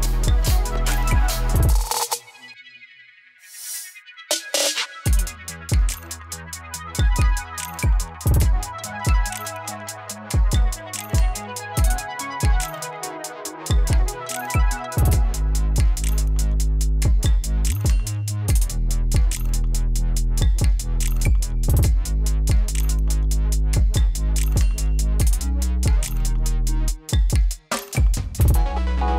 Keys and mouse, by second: 2.0 space, 2.7 click, 3.1 u, 6.5 click, 6.8 ctrl+a, 9.2 click, 13.2 Return, 13.8 click, 17.0 Return, 17.9-21.6 drag, 21.6 Return, 22.8-25.4 drag, 25.4 space.